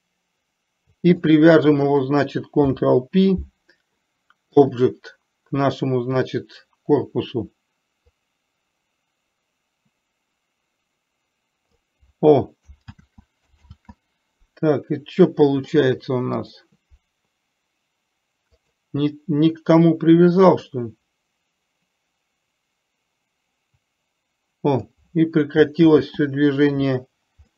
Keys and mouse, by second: 2.9 ctrl+p, 8.6-12.2 drag, 13.3 ctrl+z, 16.9 click, 21.1-25.3 drag, 26.3 ctrl+z.